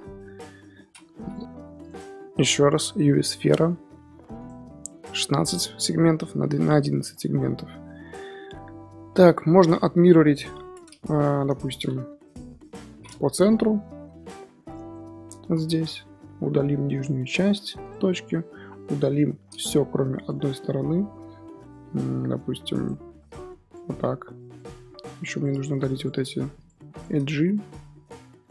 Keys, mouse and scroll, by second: 0.1 F9, 1.1 x, 2.3 shift+a, 7.1 scroll up 2, 7.7-8.3 scroll up 1, 8.3 KP_7, 8.8-9.9 middle drag, 9.9 scroll up 2, 10.2 KP_7, 11.0 middle drag, 11.3 scroll up 1, 11.4-12.3 scroll down 5, 12.3 KP_1, 12.9-13.3 scroll up 1, 13.3 Tab, 13.9 ctrl+r, 15.1 shift+middle click, 15.3 z, 15.8 1, 16.1 click, 17.2 x, 18.0 middle click, 18.9 KP_7, 20.7 scroll up 2, 22.2 click, 23.2 click, 24.1 x, 24.7-25.0 scroll up 2, 25.3 click, 25.7 shift+click, 25.9 shift+click, 26.3 shift+click, 26.5 shift+click, 26.9 shift+click, 27.3 x.